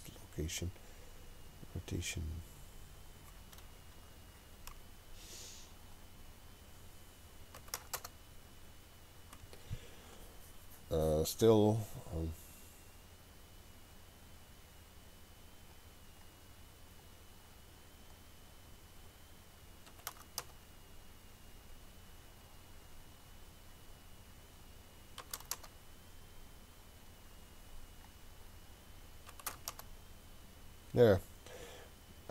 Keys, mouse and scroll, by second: 2.1-10.6 drag, 15.8-17.2 drag, 17.5-22.2 drag, 23.2-27.1 drag, 27.7-32.3 drag.